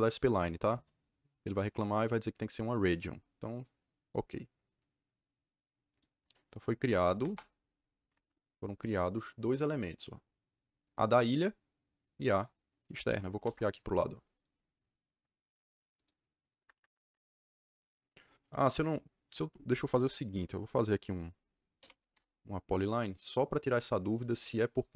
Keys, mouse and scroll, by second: 3.5 click, 5.8 click, 6.7 c, 7.0 o, 7.1 Return, 8.0 Escape, 8.1 Escape, 8.8 click, 12.2 click, 13.0 c, 13.3 o, 13.4 Return, 14.3 click, 15.9 click, 16.5 Escape, 16.7 Escape, 16.9 Escape, 21.5-22.3 typing.